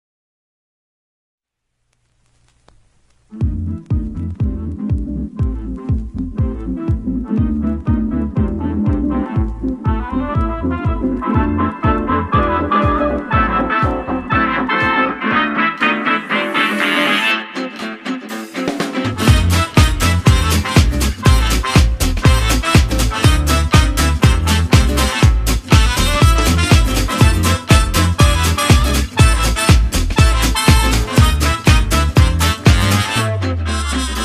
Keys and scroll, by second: 0.8 space, 1.1 space, 2.5-10.5 typing, 11.8-14.0 typing, 18.4-22.6 typing.